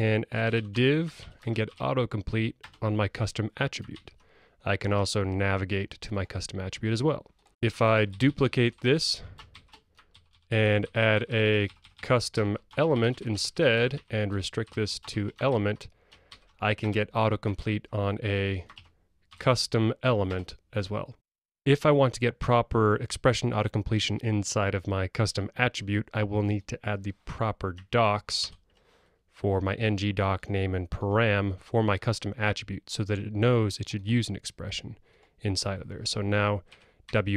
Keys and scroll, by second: 0.8 Tab, 6.3 Escape, 12.8 alt+Delete, 14.7 alt+BackSpace, 15.4 Escape, 16.4 super+e, 20.3 Return, 28.8 super+v.